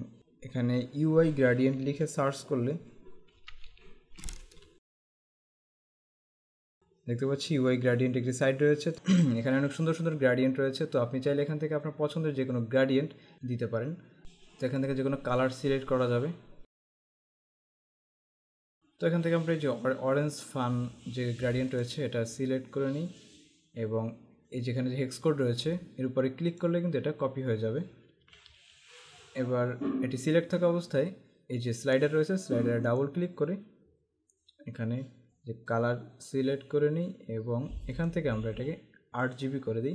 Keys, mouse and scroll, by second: 1.4-2.3 typing, 3.5 typing, 5.2 KP_Enter, 10.1 scroll down 1, 14.2-14.7 scroll up 1, 14.7 click, 17.0 click, 17.8 click, 18.8 scroll down 1, 20.1-21.1 scroll up 1, 21.9 click, 26.6 click, 28.4 alt+Tab, 33.1 click, 35.8 click, 38.2 click, 39.3 click.